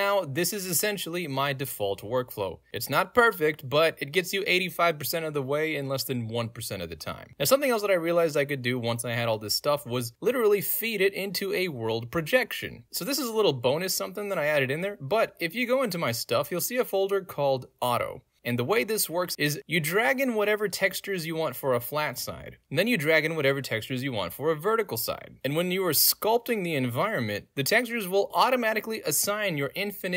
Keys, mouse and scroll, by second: 1.6-2.3 drag, 2.8 click, 3.6-7.3 right drag, 7.3 click, 15.2 click, 15.7 click, 16.0 click, 16.5 click, 17.8 middle click, 17.8 scroll down 2, 18.7 click, 18.9 ctrl+space, 19.3 click, 20.5-21.4 drag, 22.4 scroll down 1, 22.5 click, 23.3 click, 24.5 click, 24.8 right click, 25.6 click, 26.4 click, 27.0 click, 27.6 click, 27.8 click, 28.1 click, 28.3 click, 28.5 click, 28.6 click, 29.0 click, 29.4 right click, 29.5 click, 29.7 right click, 29.8 click.